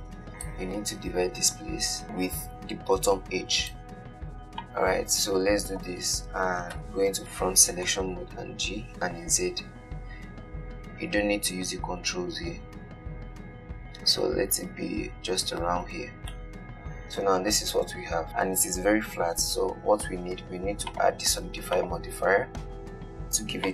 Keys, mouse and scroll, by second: 4.9 click, 7.0 KP_1, 8.3-8.9 scroll up 4, 8.9 g, 16.2 Tab, 16.6-18.8 middle drag, 21.2 click.